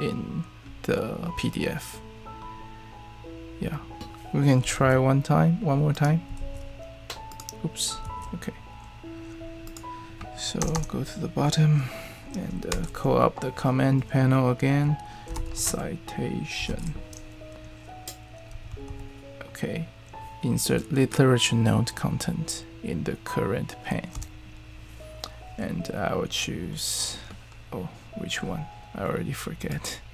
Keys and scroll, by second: 4.8 super+e, 6.4 super+e, 8.0 super+e, 10.6 Return, 10.7 Return, 12.7 super+p, 15.0-17.2 typing, 18.4-19.3 typing, 23.9-24.6 typing, 28.0 typing.